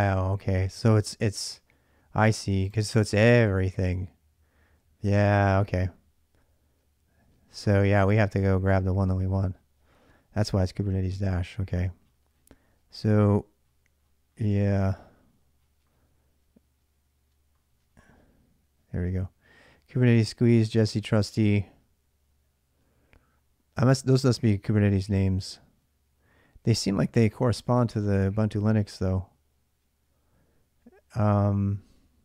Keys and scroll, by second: 7.4 alt+Tab.